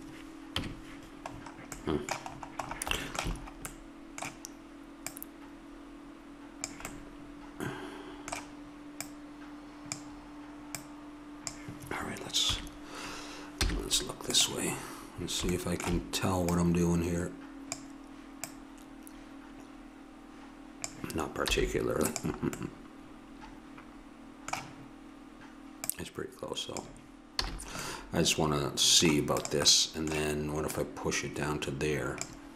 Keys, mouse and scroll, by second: 0.6 KP_Decimal, 3.7 middle click, 4.1 middle click, 5.1-6.6 middle drag, 6.6 click, 9.1-10.8 drag, 12.5 KP_3, 13.6 z, 14.7-16.1 middle drag, 16.5-18.3 drag, 18.5-20.2 drag, 21.4 z, 22.6-24.6 middle drag, 25.8-27.6 drag, 27.4 a, 29.7-32.2 drag.